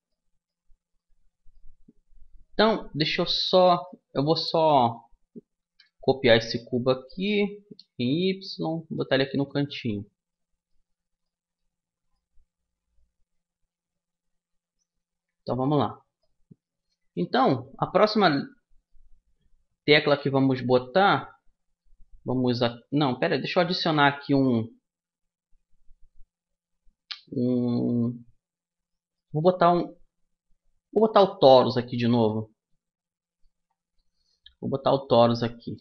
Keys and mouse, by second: 0.6-4.6 right drag, 4.8 middle click, 5.3 shift+d, 9.0-11.8 middle drag, 15.2 a, 17.2-19.0 middle drag, 21.6-23.7 middle drag, 23.3 shift+a, 31.9-33.6 middle drag, 34.4-35.8 drag.